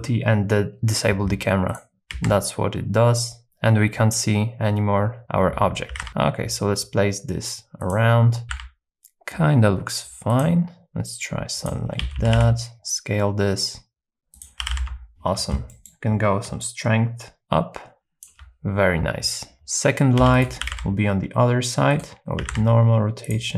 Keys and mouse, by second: 2.1 z, 5.9 r, 6.0 z, 7.8 click, 8.4 r, 8.5 z, 10.3 click, 10.8 x, 11.6 click, 12.0 s, 12.2 y, 12.4 y, 14.4 click, 14.6 g, 14.8 z, 15.8 middle click, 16.8-18.2 shift+drag, 20.2 shift+d, 20.4 right click, 20.6 r, 22.4 r, 22.6 z, 23.3 click.